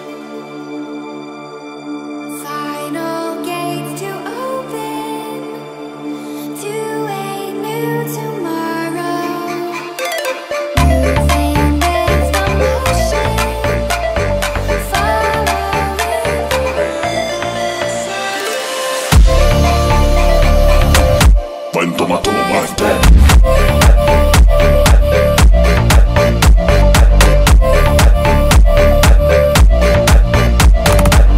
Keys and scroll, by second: 4.2 Down, 5.4 Up, 7.8 space.